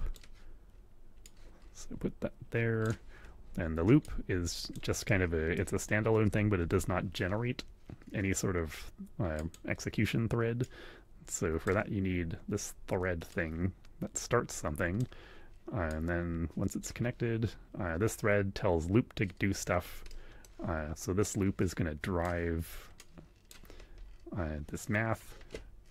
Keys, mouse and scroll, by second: 1.2-3.0 drag, 4.0 click, 5.1 click, 6.4 shift+a, 9.3 click, 10.6-11.9 drag, 13.3-15.1 drag, 15.9-17.0 drag, 20.1 click, 21.2-22.4 drag, 22.8 click.